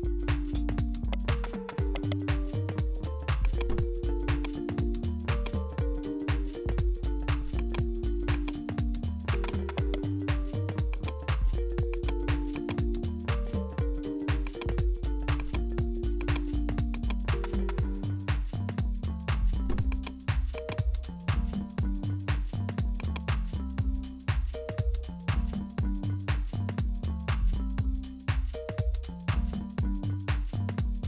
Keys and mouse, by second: 0.6 Tab, 1.1 right click, 1.9 right click, 2.5 s, 4.3 click, 5.3 click, 6.3 Tab, 7.3 Tab, 7.5-9.4 drag, 9.7 right click, 10.5 w, 11.5 w, 12.6 click, 13.5-14.6 drag, 15.4 click, 16.2 click, 16.9 click, 19.9 click, 22.0 click, 24.0 `.